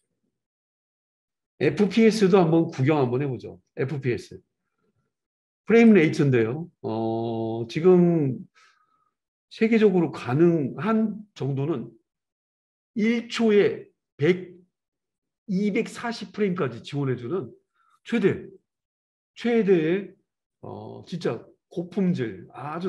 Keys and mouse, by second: 0.1-6.2 drag, 6.2-10.7 right drag, 10.7-22.8 drag.